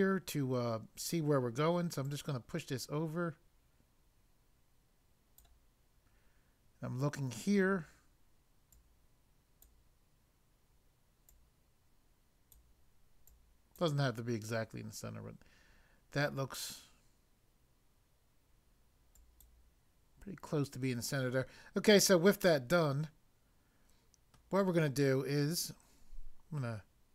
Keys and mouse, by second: 2.1 click, 8.8 click, 11.3 click, 13.2 click, 19.2 click, 22.4 middle click.